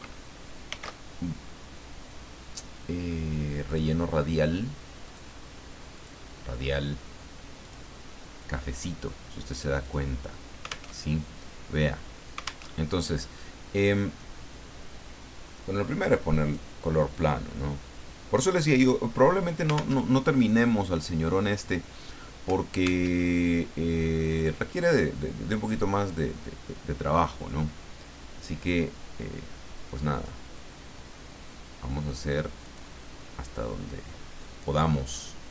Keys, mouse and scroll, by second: 0.6 ctrl+shift+f, 3.7 click, 5.1 click, 6.0 click, 7.6 click, 9.8 click, 10.9 alt+Tab, 12.7 alt+Tab, 15.8 click, 17.1-20.0 drag, 20.0 alt+Tab, 23.1 alt+Tab, 24.4 click, 30.1 click, 32.6 click.